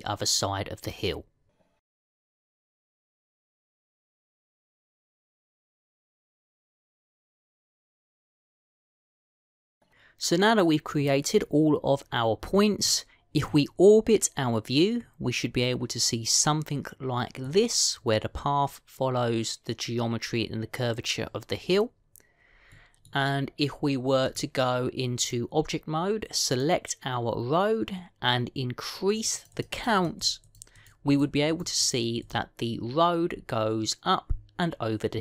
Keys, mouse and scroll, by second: 2.2 e, 3.1 e, 3.9 e, 4.5 e, 5.6-7.9 typing, 8.6 scroll down 2, 9.2 e, 13.3 scroll down 1, 13.7 middle click, 23.4-25.1 scroll down 2, 23.6 middle click, 25.1 click, 27.4 click, 30.0 click, 30.2 click, 30.4 click, 30.8 click, 31.3 click, 31.6 click, 32.0 click, 32.4 click, 32.6 click, 33.1 click.